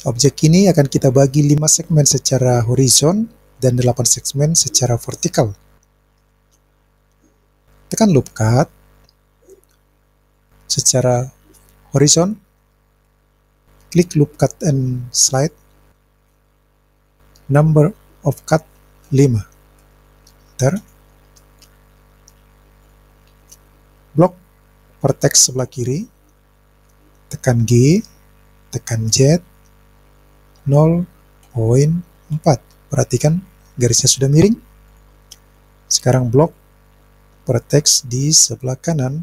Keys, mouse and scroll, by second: 8.2 click, 10.4 click, 15.6 click, 18.4-20.8 drag, 22.8 click, 24.3-25.9 drag, 29.1 g, 29.1 z, 30.6 KP_0, 31.5 ., 32.4 KP_4, 34.9 click, 36.5-38.0 drag.